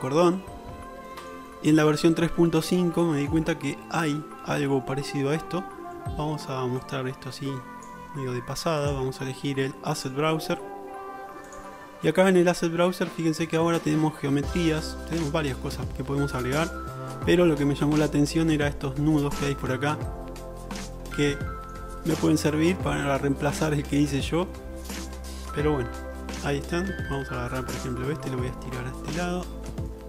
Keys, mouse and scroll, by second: 1.6 click, 1.7 middle click, 1.8-2.1 alt+drag, 2.1 alt+middle click, 2.2-2.7 alt+shift+drag, 2.3 middle drag, 2.7-7.0 shift+middle drag, 7.0-14.1 drag, 15.0 click, 21.4-28.4 shift+drag, 28.4-30.0 middle drag.